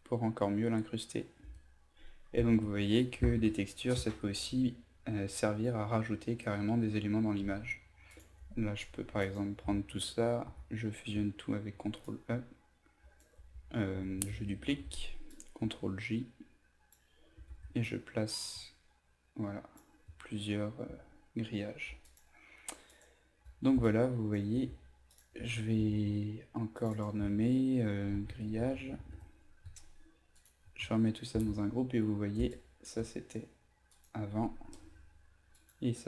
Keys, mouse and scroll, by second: 9.1 shift+click, 10.4 ctrl+e, 11.7 v, 12.0-13.2 drag, 13.5 ctrl+alt+z, 14.6 ctrl+j, 15.2 click, 17.8-19.8 drag, 20.8 ctrl+z, 22.0 alt+click, 22.8 alt+click, 23.8 click, 25.0 shift+click, 25.7 ctrl+g, 26.7 click, 28.1-29.4 typing, 30.3 shift+click, 31.3 ctrl+g, 32.4 space, 32.5 click.